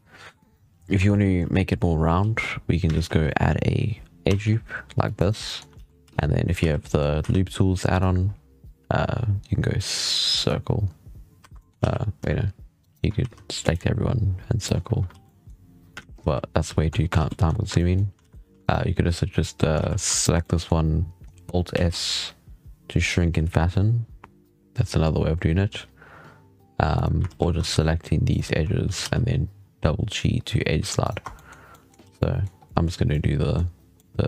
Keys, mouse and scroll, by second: 0.3 right click, 0.7 Tab, 1.0-2.0 middle drag, 2.0 ctrl+t, 2.8 ctrl+z, 3.1-4.1 middle drag, 4.1 ctrl+r, 5.3 middle drag, 5.6 alt+a, 6.4 a, 6.7 middle click, 7.0 w, 11.3 1, 11.4 middle drag, 11.7 alt+a, 12.7 alt+shift+right click, 13.1 w, 15.0 alt+a, 15.1-15.9 middle drag, 15.9 ctrl+z, 16.1 ctrl+z, 16.4 ctrl+z, 17.0 alt+a, 17.6-18.1 middle drag, 18.1 alt+a, 18.5 alt+shift+right click, 19.6 alt+a, 20.0 alt+shift+right click, 20.3-21.6 middle drag, 21.6 alt+s, 27.1 alt+a, 27.6 alt+shift+right click, 28.2 alt+shift+right click, 28.7 g, 31.1 Tab, 31.2-31.9 middle drag, 31.9 alt+a, 32.0-32.4 middle drag, 32.4 scroll up 2, 32.5-34.1 middle drag, 34.1 scroll down 3.